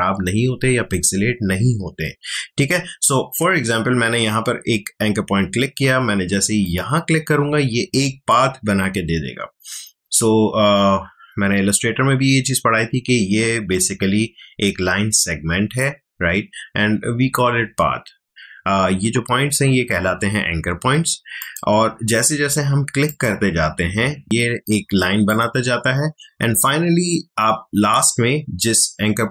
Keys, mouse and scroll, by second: 6.6 click, 21.4 click.